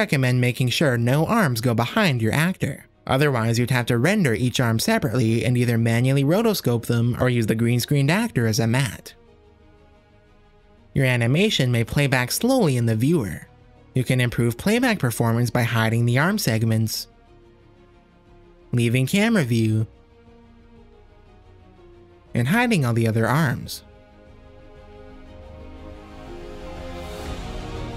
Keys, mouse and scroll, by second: 0.0-6.1 typing, 1.7 click, 2.1 drag, 2.6 click, 3.2 shift+click, 3.4 shift+click, 4.2 middle click, 4.3 shift+click, 4.4 middle click, 4.6 click, 5.1 middle click, 5.7 click, 6.0 middle click, 6.7 click, 7.0 click, 7.3 shift+r, 7.4 shift+drag, 8.4-8.8 drag, 8.7 r, 8.9 r, 9.1-10.0 drag, 10.7-14.1 drag, 14.7 click, 15.1 shift+click, 15.6 shift+click, 16.1 shift+click, 16.8 h, 21.8 click, 22.6 click, 23.5 click.